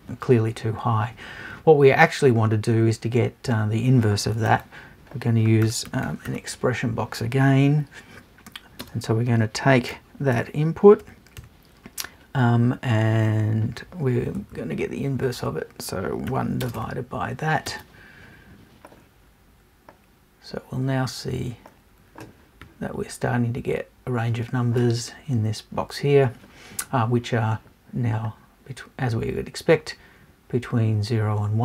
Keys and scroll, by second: 14.4 Left, 15.3 Right.